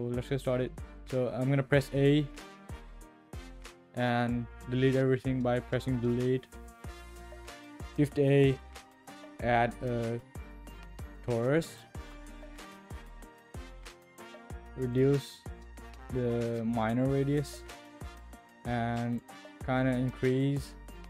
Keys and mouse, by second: 0.4-0.8 middle drag, 1.1 middle click, 2.9 a, 6.5 Delete, 8.1 shift+a, 12.6 click, 14.9-19.2 drag, 19.8-21.0 drag.